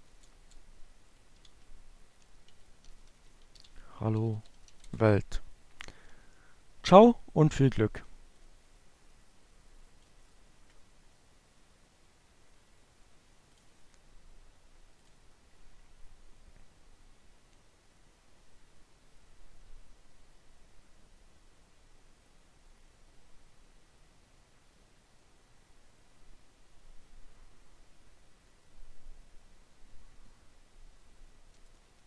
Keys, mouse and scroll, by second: 0.0-2.1 typing, 2.4 shift+Return, 6.1-8.7 drag, 11.6 click, 12.7 click.